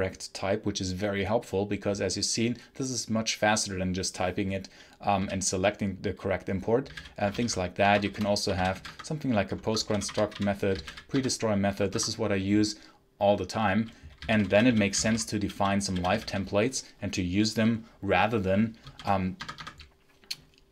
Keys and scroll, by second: 5.0 j, 6.5-11.2 typing, 9.4 Escape, 11.8 Escape, 13.8-16.6 typing, 18.7 shift+a, 19.3 Tab, 19.5 Tab.